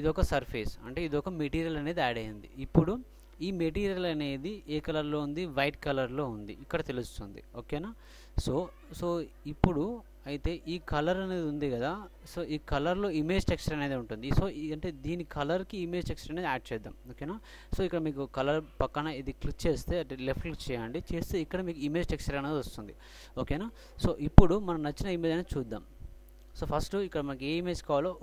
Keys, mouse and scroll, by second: 7.1-8.8 drag, 20.3-22.5 drag, 25.7-27.0 drag.